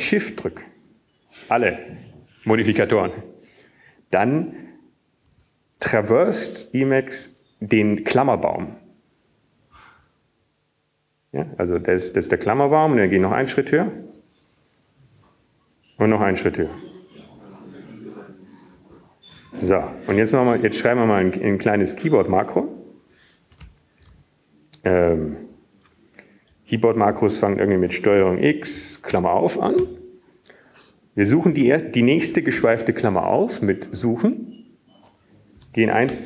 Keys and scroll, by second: 0.6 Up, 0.7 Right, 9.4 ctrl+alt+shift++, 13.0 ctrl+alt+shift++, 22.6 ctrl+alt+shift+Down, 22.9-25.6 typing, 26.6 Up, 27.9 Up, 31.5-36.2 Up, 31.9 ctrl+x, 34.5 ctrl+s, 34.5 (, 35.5 {.